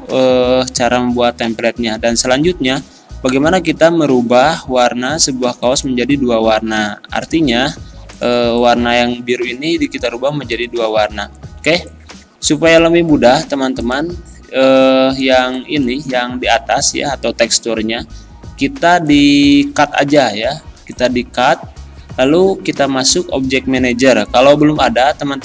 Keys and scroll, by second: 7.6 ctrl+z, 9.8 ctrl+z, 11.6 z, 16.8 ctrl+z.